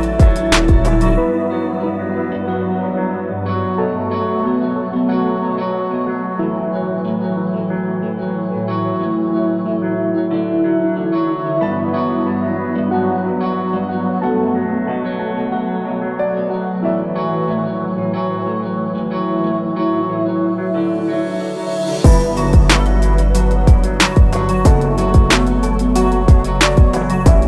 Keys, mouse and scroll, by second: 0.2 scroll down 1, 2.8 click, 3.2 alt+click, 4.8 alt+scroll up 1, 5.6-6.9 scroll down 1, 6.9 click, 25.6 click.